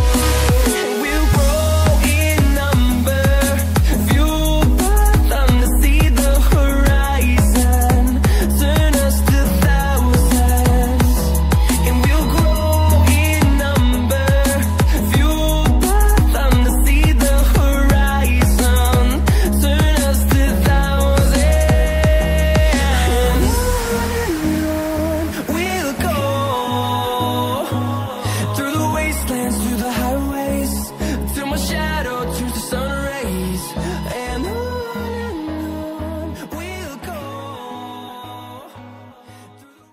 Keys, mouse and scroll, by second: 0.0-1.7 typing, 1.9 click, 5.6 scroll up 1, 6.1 shift+click, 6.3-8.2 typing, 7.2-7.7 scroll down 1, 7.9 click, 10.4-11.1 scroll up 1, 11.1 scroll, 11.2 shift+click, 13.7-14.3 scroll down 1, 14.3-14.9 scroll up 1, 14.9 click, 17.6 scroll down 1, 20.4-20.7 scroll up 1, 21.6-22.8 scroll down 1, 22.8 click.